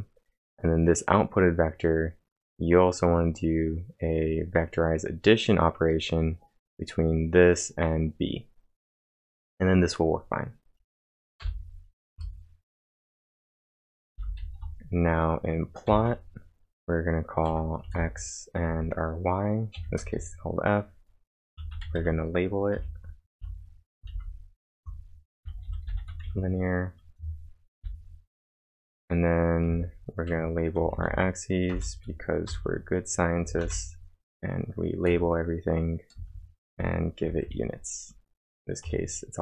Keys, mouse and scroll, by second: 11.1-11.9 typing, 12.1 Return, 14.1-15.9 typing, 17.5 x, 18.0 space, 18.7 f, 19.8 ,, 20.0 space, 21.3-24.1 typing, 25.4-26.7 typing, 27.8 typing, 28.5 Return, 31.7 Return, 32.2-33.6 typing, 34.8-37.7 typing.